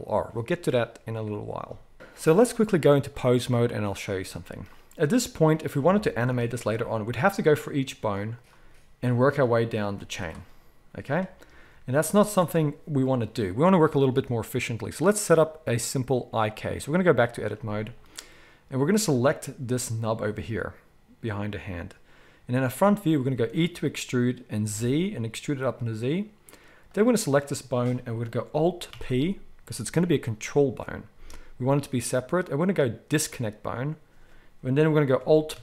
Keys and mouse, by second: 3.0-5.6 drag, 5.6-8.3 middle drag, 6.3 r, 8.3 click, 8.4-9.7 middle drag, 8.5 r, 9.7 click, 9.8-14.0 middle drag, 9.8 r, 11.4 ctrl+z, 11.6 ctrl+z, 12.0 ctrl+z, 14.0-19.0 drag, 19.0-35.6 middle drag, 23.3 e, 28.8 alt+p, 35.5 alt+p.